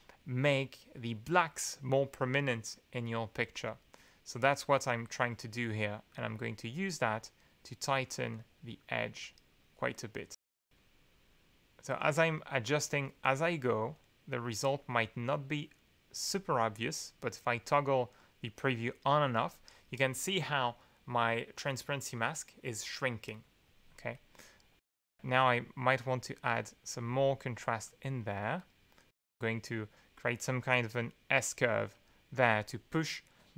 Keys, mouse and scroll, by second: 3.3-5.0 drag, 6.1 click, 7.7 click, 8.8 click, 10.4 click, 11.9 click, 12.8 click, 13.8 click, 15.1-16.3 drag, 17.5 click, 18.2 click, 18.8 click, 19.2 click, 24.8 click, 26.0-27.2 drag, 27.8 click, 29.4 click, 31.0-32.1 drag.